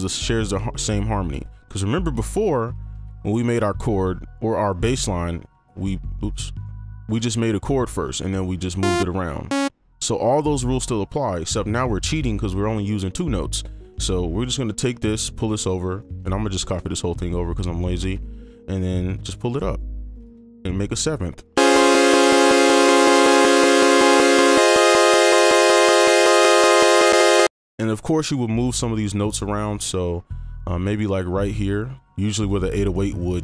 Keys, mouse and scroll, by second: 0.3 click, 0.6 click, 2.8 click, 5.3 click, 6.3 right click, 7.0 click, 7.2 click, 8.0 right click, 10.9 ctrl+click, 14.0 ctrl+click, 15.0 shift+click, 16.0 right click, 16.3 ctrl+click, 17.0 shift+click, 18.2 shift+click, 21.1 right click, 27.4 space, 29.8 right click, 31.2 ctrl+click.